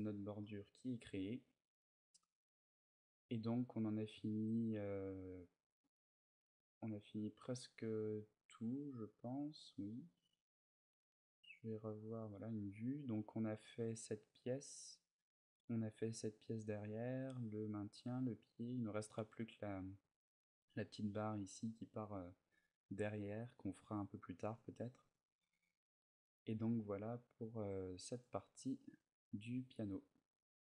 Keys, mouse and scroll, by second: 0.1 middle click, 28.3 click, 28.7 middle click.